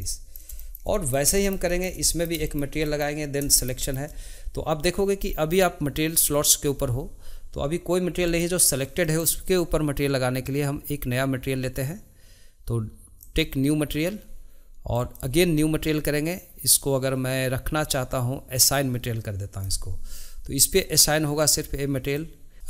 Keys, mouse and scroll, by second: 0.0-6.8 middle drag, 8.2-12.0 middle drag, 13.2-18.0 drag, 18.7-21.5 drag, 22.5-22.6 shift+middle drag.